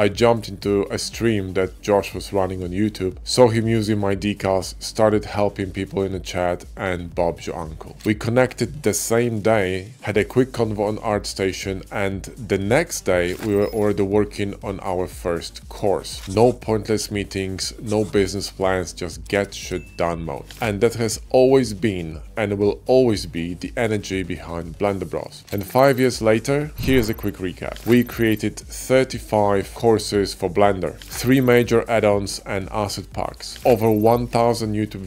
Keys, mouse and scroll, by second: 0.3 middle click, 1.3 middle click, 3.3 click, 6.5 click.